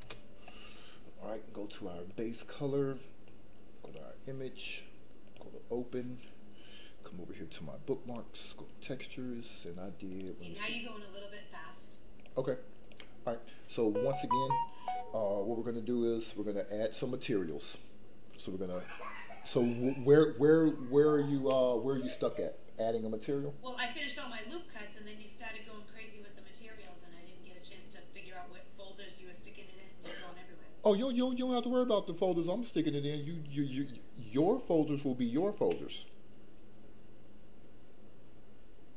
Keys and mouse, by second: 2.0-4.0 drag, 5.2 click.